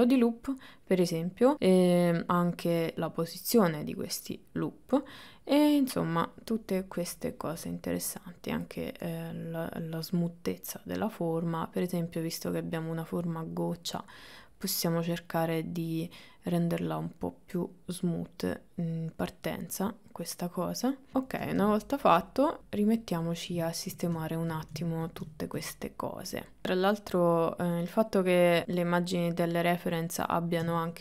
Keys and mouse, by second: 2.9-5.7 drag, 8.9-21.1 drag, 21.4 middle click, 21.8 shift+middle click, 22.6 click, 23.8-24.8 ctrl+middle drag, 24.9 ctrl+middle click, 25.4 shift+middle click, 26.4 click, 27.1 middle click, 27.5 middle click, 27.9 click, 28.2 KP_1, 28.7 click, 29.1 click, 29.4 click, 29.9 click, 30.2 shift+middle click, 30.5 click, 30.8 click.